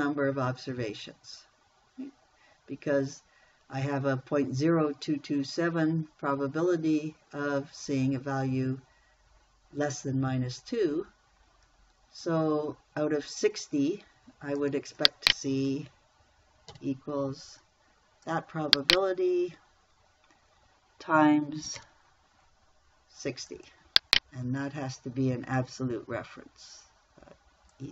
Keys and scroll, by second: 17.2 =, 22.2 shift+8.